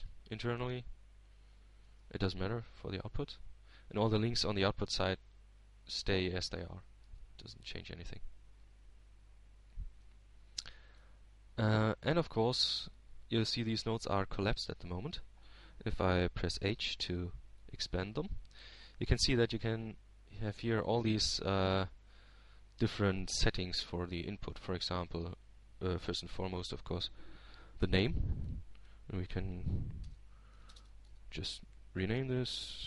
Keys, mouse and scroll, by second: 1.4 click, 2.5-4.3 drag, 7.6 shift+Tab, 10.8 Tab, 13.8-15.1 middle drag, 15.5-17.0 drag, 18.4-19.5 drag, 20.3 h, 21.3-22.4 drag, 22.5-23.5 middle drag, 23.5-25.1 scroll up 1, 27.5-28.6 drag, 28.7 click.